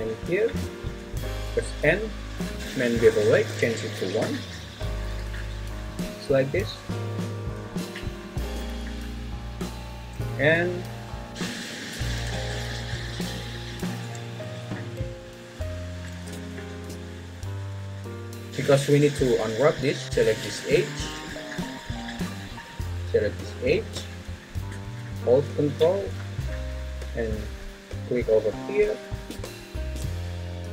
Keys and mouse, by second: 1.4 n, 3.1 click, 5.0 Tab, 5.5 `, 7.5 n, 10.3 `, 12.3 `, 14.4 Tab, 28.2 ctrl+click.